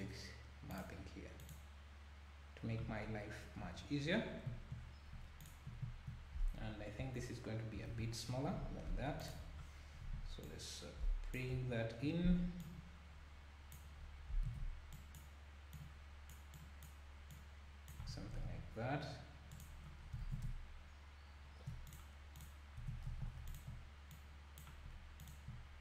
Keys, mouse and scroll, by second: 3.6-4.1 scroll up 3, 4.1 scroll down 2, 5.4 alt+click, 7.0 Left, 7.9 ctrl+l, 8.5 s, 9.4 KP_7, 9.7-10.4 scroll up 1, 10.4 click, 11.5 KP_1, 12.6 click, 14.4 z, 15.0 click, 15.7 click, 16.6 click, 17.3 click, 18.0 Tab, 18.3 z, 19.6 click, 20.0-20.4 scroll down 4, 20.3 ctrl+s, 21.9 click, 22.4 click, 22.8 Tab, 23.1 1, 23.5 alt+click, 24.1 click, 25.2 alt+click.